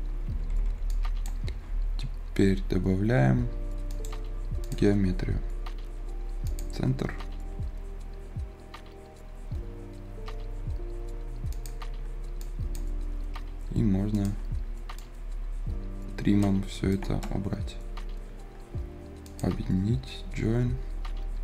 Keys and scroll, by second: 0.2 Escape, 1.6 Escape.